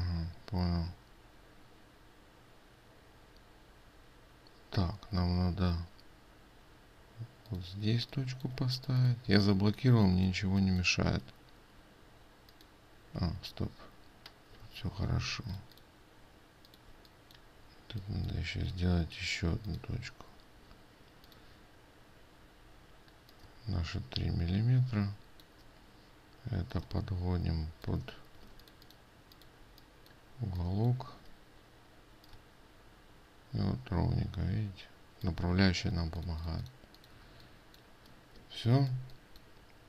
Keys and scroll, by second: 13.7 ctrl+z, 15.2 ctrl+space, 15.8 ctrl+space, 29.1 ctrl+space.